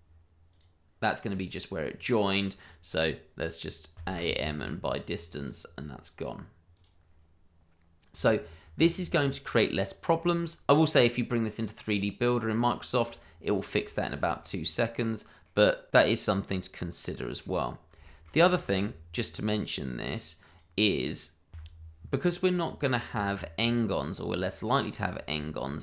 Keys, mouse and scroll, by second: 0.5 click, 1.2 scroll up 1, 1.9 scroll down 1, 3.9 a, 4.1 m, 5.3 click, 8.6 Tab, 8.9-9.3 scroll down 1, 9.3 middle click, 10.2 shift+middle click, 10.5 scroll up 1, 12.1 shift+middle click, 12.1 middle click, 12.2 shift+middle click, 13.1 middle click, 13.2 shift+middle click, 13.4 scroll down 1, 13.7 shift+middle click, 14.1 middle click, 15.1-15.9 scroll down 1, 15.9 middle click, 17.7 scroll down 1, 18.0 shift+middle click, 18.6 shift+a, 20.4 click, 21.5 y, 22.9 click, 23.9-24.2 scroll up 1, 24.4 shift+middle click, 24.7 scroll up 1, 25.1 shift+middle click, 25.6 s.